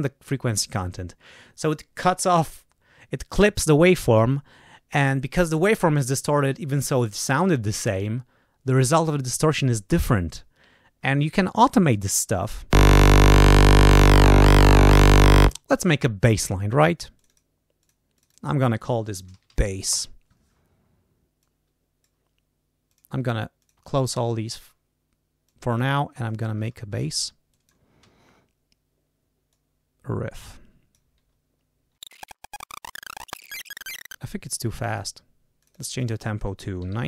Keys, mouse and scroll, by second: 13.1-15.4 drag, 17.1 click, 17.7 click, 18.1 click, 18.8-19.9 typing, 21.3 click, 22.8 click, 23.5 click, 24.4 click, 25.4 click, 26.2 ctrl+scroll up 2, 27.5 click, 28.0 d, 29.4-31.1 drag, 31.7 ctrl+scroll up 4, 32.0 click, 32.1 click, 32.2 shift+click, 32.3 click, 32.4-34.1 typing, 32.5 click, 32.5 click, 32.6 click, 32.8 click, 32.9 click, 33.3 ctrl+a, 33.3 alt+shift+Up, 33.4 click, 33.6 click, 33.7 click, 33.8 click, 33.9 click, 34.5 click, 35.5 click, 36.5-37.0 typing.